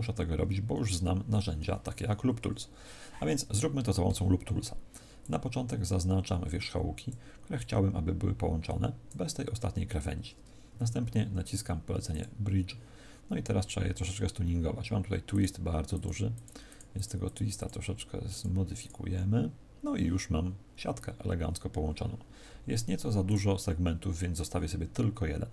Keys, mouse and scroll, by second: 1.5 a, 12.0 click, 15.2 click, 15.8-20.6 click, 23.1 click.